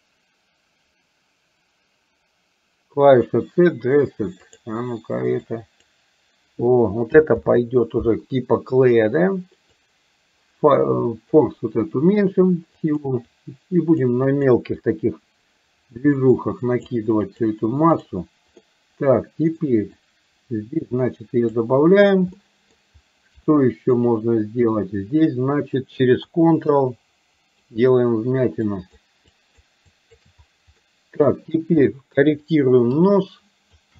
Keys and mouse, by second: 4.6 click, 5.5 click, 7.5 ctrl+z, 9.9-11.4 drag, 12.3 click, 12.9 click, 13.3 click, 14.4 click, 14.9-16.9 drag, 17.3 click, 18.0 click, 18.8 middle click, 20.1-21.6 drag, 22.5 middle click, 23.5 shift+middle click, 26.9 ctrl+click, 28.9 ctrl+click, 29.4 ctrl+click, 30.0 ctrl+click, 30.8 middle click, 31.9 middle click, 33.0 ctrl+click.